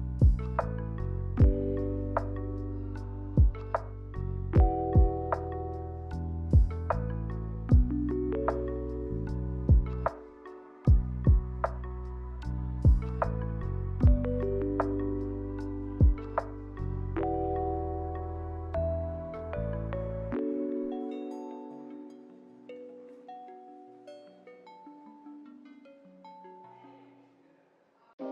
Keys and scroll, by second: 12.5 ctrl+z, 17.0 g, 20.1 Delete, 20.4 Delete, 21.1 n, 22.7 a, 25.3 ctrl+z, 25.9 b, 27.5 a.